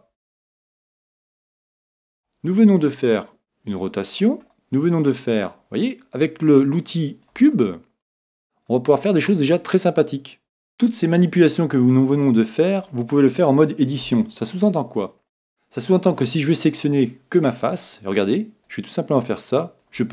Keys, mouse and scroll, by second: 0.8-2.5 drag, 1.2-3.1 middle drag, 3.3-5.0 drag, 4.5-6.4 middle drag, 6.5-8.2 drag, 7.6-9.5 middle drag, 9.8 middle click, 11.9-13.8 middle drag, 12.8 right click, 14.0 Tab, 14.5-17.1 middle drag, 16.6 right click, 18.6-20.1 drag.